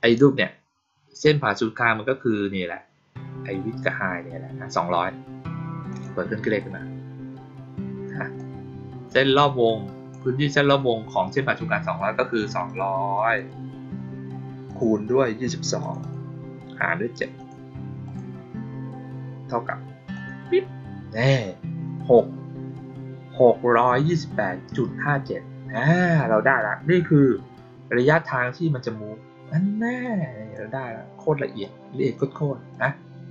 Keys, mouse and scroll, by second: 5.8 click, 8.3-10.0 drag, 12.6 click, 13.1 click, 13.3 click, 14.6 click, 15.7 click, 15.9 click, 17.3 click, 18.0 click, 20.1 click, 29.9-30.5 drag, 31.5-32.1 drag, 32.6 click.